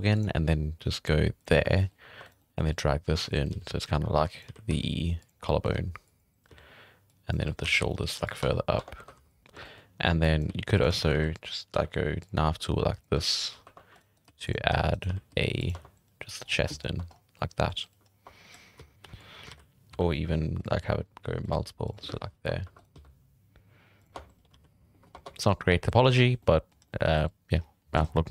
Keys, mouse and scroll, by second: 1.7 middle drag, 2.0-4.7 typing, 2.2 right drag, 2.4 middle drag, 4.2 drag, 5.3 scroll down 1, 5.4 middle drag, 5.7 g, 6.5 z, 7.0-7.4 drag, 7.4 z, 7.6 g, 8.4 Tab, 8.7 Tab, 8.9 1, 9.1 z, 9.2 drag, 9.6 shift+middle drag, 9.7 scroll up 2, 10.2 drag, 10.4 g, 10.9 shift+middle click, 11.1 alt+a, 11.4 scroll up 1, 11.7 k, 13.6-15.2 typing, 13.9 right click, 14.1 right click, 14.9 right click, 15.7 Tab, 15.9 scroll up 1, 16.4-16.9 scroll down 9, 16.6 Tab, 16.9 Tab, 17.1 scroll up 8, 17.3-17.8 middle drag, 18.1 scroll down 4, 18.2 Tab, 18.5 scroll up 1, 18.7 z, 18.9 right click, 19.5 alt+a, 19.9 k, 22.6 2, 22.7 right click, 22.9 x, 24.0 g, 24.1 Tab, 24.5 alt+a, 24.6 scroll down 6, 24.9 shift+middle click, 25.0-25.4 scroll up 4, 25.4 3, 25.6 scroll down 1, 25.7 Tab, 26.1 alt+a, 26.2 scroll down 7, 26.4-26.7 middle drag, 26.7 scroll up 2, 26.8 middle drag, 27.6-28.0 scroll down 5, 28.0 scroll up 1, 28.1-28.3 middle drag.